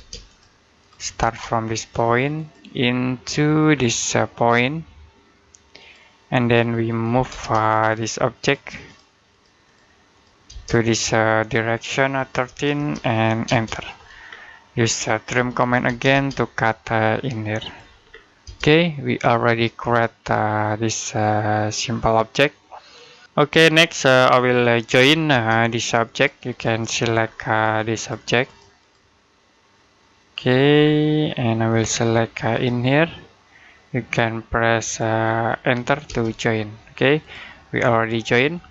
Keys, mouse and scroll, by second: 0.1 click, 1.1 space, 2.2 click, 3.6-5.6 scroll up 1, 5.6 click, 7.0 m, 7.1 space, 7.7 click, 10.3 space, 10.5 click, 12.3-13.3 typing, 14.1-14.5 scroll down 1, 14.5 middle click, 15.0-15.8 typing, 17.5 click, 17.9 scroll down 1, 18.3 space, 18.7 middle click, 22.4 middle click, 24.1 middle click, 24.7 j, 25.2 space, 25.6 click, 27.1-27.5 scroll up 1, 27.5 click, 30.6 scroll down 1, 30.9 scroll up 1, 30.9 middle click, 31.6 click, 35.1 scroll down 1, 35.3 middle click, 35.9 space, 37.0 click.